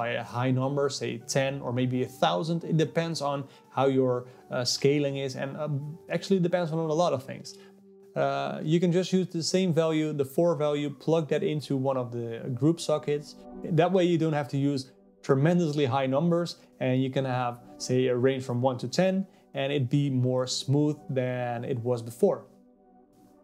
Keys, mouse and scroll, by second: 2.1 KP_0, 4.7-5.8 drag, 5.8 KP_0, 7.4-10.4 drag, 10.4 KP_0, 12.0-13.7 drag, 14.9 click, 16.1 middle click, 16.8 click, 17.4-18.5 middle drag, 18.5 click, 19.7 click, 20.7 click.